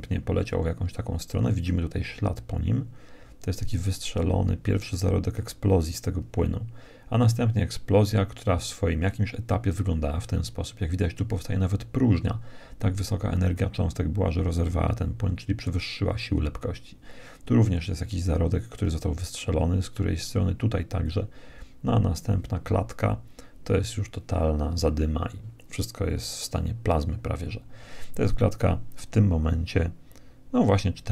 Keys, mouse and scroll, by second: 5.9 Right, 20.9 Right.